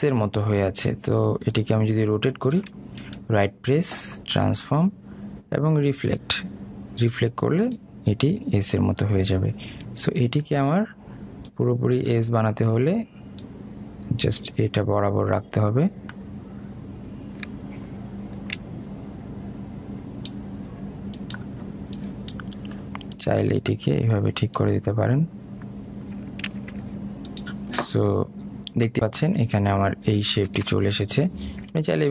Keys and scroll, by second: 31.8 ctrl+z.